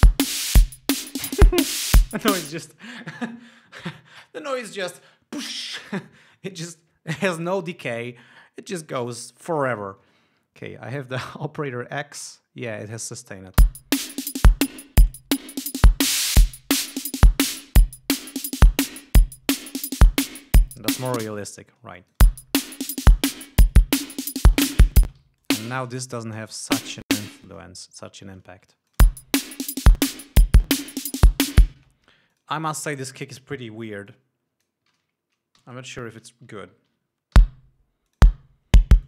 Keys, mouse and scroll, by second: 0.7 click, 2.1 click, 2.9 space, 14.0 l, 14.4 click, 15.9-19.5 drag, 20.1-21.3 drag, 21.3 ctrl+scroll down 1, 21.6 ctrl+space, 22.4 ctrl+click, 22.6 space, 23.3 ctrl+click, 23.8 ctrl+scroll up 2, 24.1 ctrl+click, 24.9 e, 25.0 shift+click, 25.2 shift+right click, 25.5 shift+space, 25.6 shift+d, 25.8 shift+click, 26.8 shift+right click, 27.0 shift+click, 27.7 shift+right click, 28.8 ctrl+scroll down 2, 29.1 ctrl+click, 29.4 ctrl+space, 31.0 scroll up 2, 32.0 click, 32.2 space, 32.7 click, 33.3 click, 34.5 click, 35.3 ctrl+y, 36.0 g, 36.1 click, 37.7 l, 38.5 click.